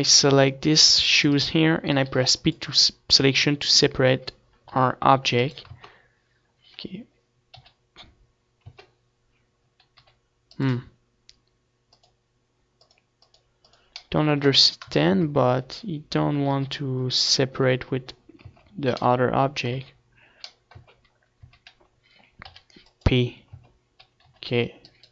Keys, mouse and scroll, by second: 0.2 c, 1.3-3.2 right drag, 1.8 p, 3.2 Tab, 4.5 g, 5.5 Tab, 7.2 g, 8.4 Tab, 9.6 g, 10.1-13.3 middle drag, 13.3-14.8 drag, 13.4 middle click, 14.3 KP_3, 14.8 Tab, 15.2-17.8 middle drag, 15.9 g, 17.4 g, 18.0 Tab, 19.1 z, 20.3 Tab, 20.8 a, 21.8 p, 22.8 Tab, 23.5 g, 24.3 right click, 24.5 z, 24.8 middle click.